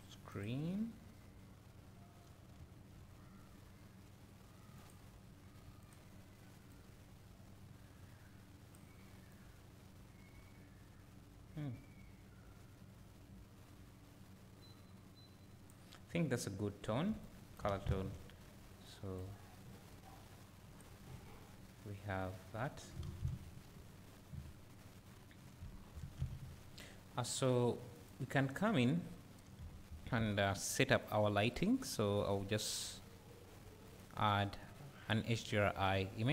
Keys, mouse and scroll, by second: 0.4-4.8 drag, 2.6 `, 17.8 ctrl+s, 19.3-28.1 drag, 22.6-23.3 scroll down 2, 23.9-24.3 scroll up 1, 25.8-26.1 scroll down 1, 31.4 click, 35.5-36.3 drag.